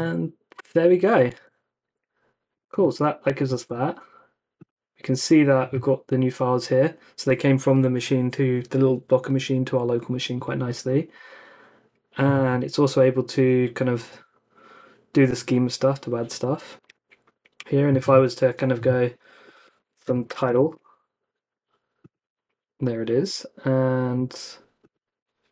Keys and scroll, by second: 1.3 super+Tab, 2.5 super+Tab, 3.5 super+Tab, 16.8 super+Tab, 19.5-21.0 typing, 23.2 super+Tab, 25.0 ctrl+c.